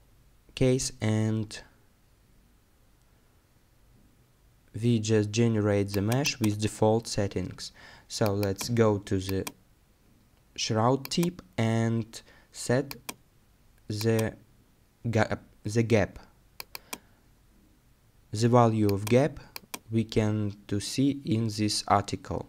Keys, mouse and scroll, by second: 7.1-9.0 scroll up 1, 20.1 scroll down 1, 21.7 scroll up 1.